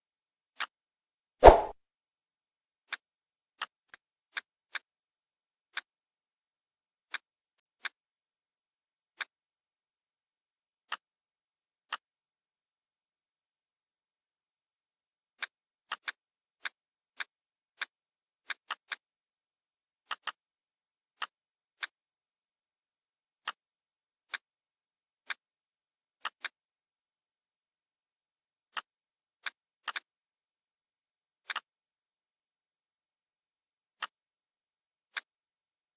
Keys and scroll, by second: 8.1 Right.